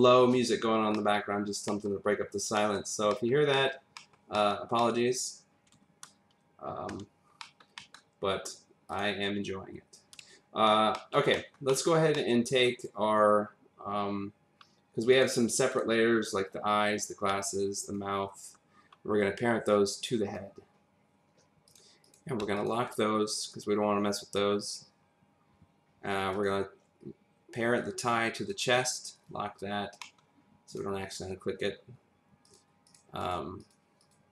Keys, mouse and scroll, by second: 0.5 click, 0.5-0.9 scroll up 1, 0.9 middle click, 1.4-1.7 scroll down 1, 1.7 middle click, 2.2-2.6 scroll up 1, 2.6 middle click, 3.5 middle click, 4.0 middle click, 4.4 middle click, 6.3 middle click, 6.9 v, 7.4 middle click, 7.7 double middle click, 8.9 click, 10.9 middle click, 11.3 middle click, 11.7 middle click, 12.2 middle click, 12.8 click, 15.1 click, 15.7 click, 17.4 ctrl+click, 17.8 ctrl+double click, 19.7 click, 21.7 click, 22.0 click, 22.6 shift+click, 27.8 click, 29.1 click, 30.0 middle click, 30.7 click, 32.4 click, 33.2 click, 33.6 click, 34.0 click.